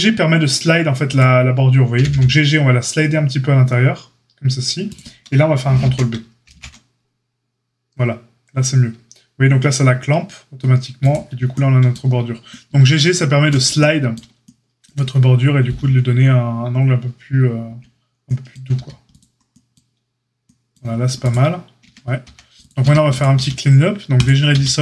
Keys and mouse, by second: 1.7-21.1 middle drag, 1.9 g, 6.4 ctrl+b, 17.6 Tab, 18.7 a, 21.1 click, 21.2-24.8 middle drag, 21.8 Tab, 22.2 a, 22.8 a, 23.3 q, 24.4 q.